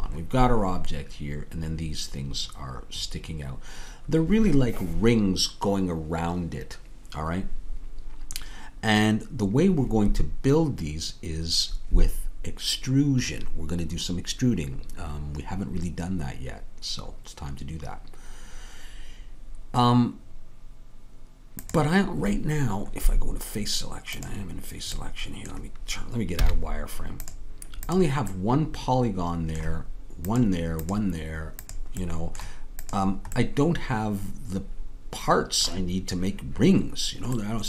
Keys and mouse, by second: 25.0-26.4 drag, 26.4 z, 32.4-35.3 drag.